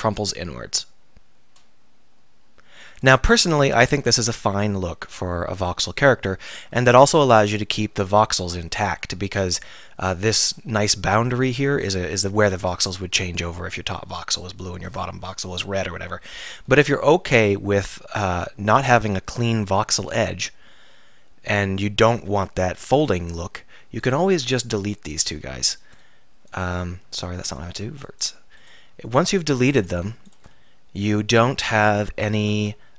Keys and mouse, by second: 3.1-4.5 drag, 4.5 alt+r, 7.9 Tab, 8.5 Tab, 9.1 Tab, 17.3-26.0 right drag, 24.9 x, 26.0 click, 27.1 ctrl+z, 27.5 x, 30.6 f, 32.6 f.